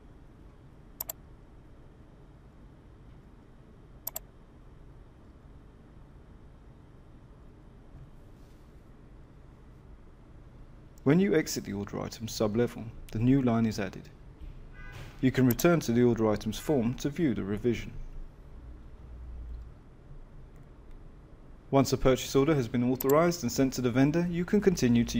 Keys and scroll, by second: 10.9 Escape.